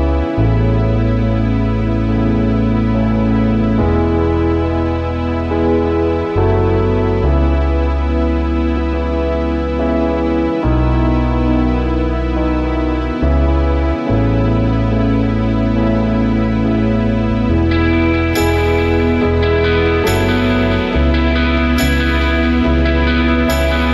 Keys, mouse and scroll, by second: 0.7 alt+scroll up 1, 2.9 space, 9.9 alt+scroll down 1, 10.5 space, 12.7 ctrl+u, 13.3 alt+scroll up 1, 13.5 space, 14.0 alt+scroll up 1, 15.0 space, 19.5 ctrl+z, 21.1 shift+click.